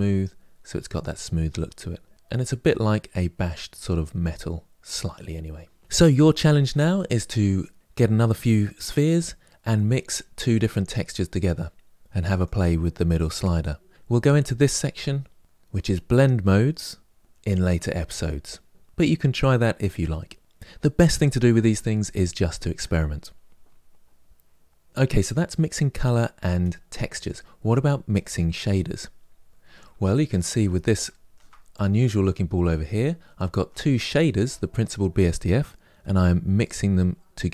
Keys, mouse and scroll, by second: 12.3-29.6 drag, 29.6-31.6 shift+middle drag, 31.6 click, 36.5-37.5 drag.